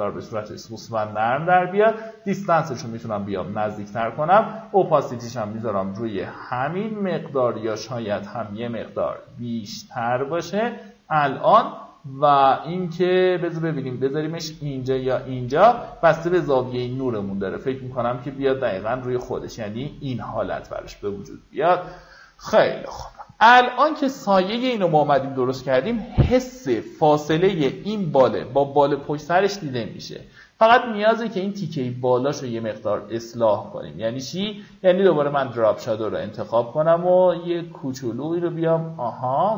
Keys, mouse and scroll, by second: 23.7-24.5 alt+scroll down 2, 24.5-24.9 alt+scroll up 2, 29.4-39.5 drag.